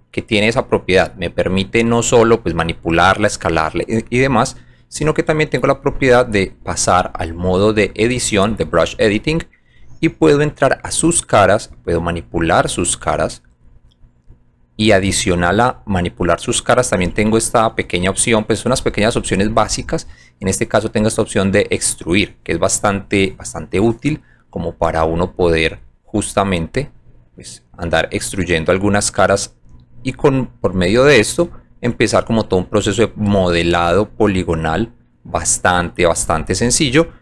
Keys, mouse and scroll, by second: 1.7 alt+click, 2.7 alt+click, 3.7 alt+click, 4.7 click, 6.4 click, 9.2 click, 10.2 click, 11.1 click, 12.3 click, 13.3 click, 14.5 click, 15.5 click, 25.4 click, 26.6 click, 27.3 click, 29.0 click, 30.9 click, 32.2 alt+middle click, 33.3 alt+click, 35.1 alt+right click, 36.9 alt+click.